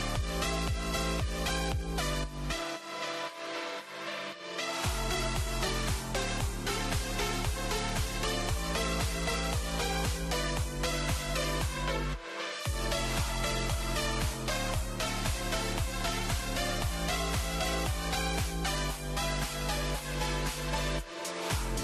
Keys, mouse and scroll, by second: 0.2-0.6 scroll down 2, 0.6-2.7 shift+middle drag, 2.7 click, 3.6 click, 7.6-10.0 drag, 10.6 click, 15.5 click, 17.1 click, 18.4 click, 19.3-21.8 drag.